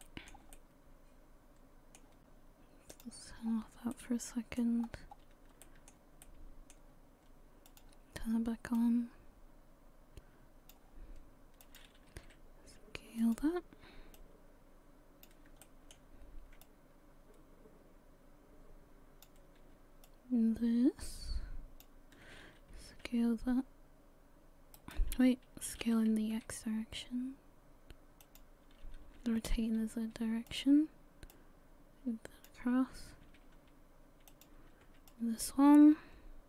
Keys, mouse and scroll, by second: 0.0 shift+middle click, 0.5 middle click, 2.9 click, 3.4 scroll down 5, 3.9 middle click, 4.8-5.5 scroll up 3, 5.6 shift+middle click, 6.2 middle click, 7.7 click, 8.8 click, 11.6 click, 12.2 s, 14.2 click, 15.6 shift+middle click, 16.6 click, 20.1 shift+click, 23.0 s, 25.8 s, 29.2 r, 31.3 click, 33.2 s, 35.1 click.